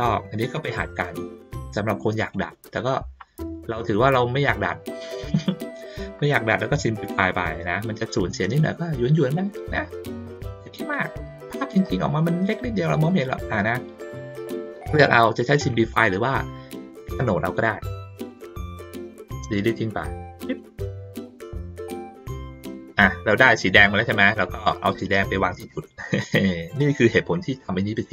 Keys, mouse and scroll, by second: 1.7 click, 2.9 ctrl+middle click, 5.2 ctrl+middle click, 6.0 ctrl+middle click, 6.9-8.0 drag, 8.4 ctrl+middle click, 9.4 middle click, 11.8 click, 13.3 ctrl+middle click, 26.0-27.3 drag.